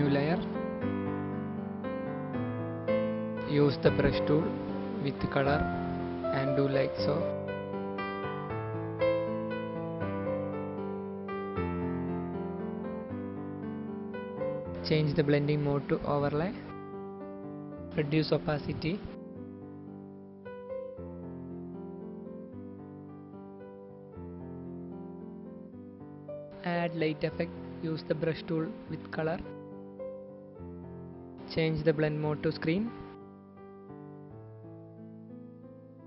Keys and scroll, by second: 6.2 b, 6.7 [, 8.6-9.4 typing, 12.6 ctrl+z, 23.0 b, 26.9-27.3 typing, 35.4 ctrl+t.